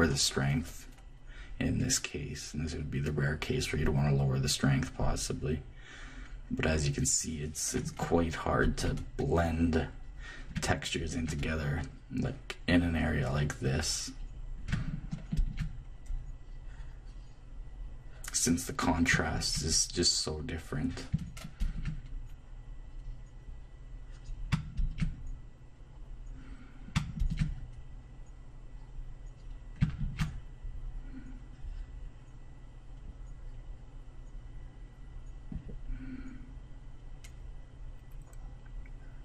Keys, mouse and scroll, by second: 8.6-13.3 drag, 14.7 click, 15.4-17.9 drag, 19.3-23.9 drag, 24.8-26.8 drag, 27.2-29.2 drag, 30.0-32.5 drag, 35.9-39.2 drag.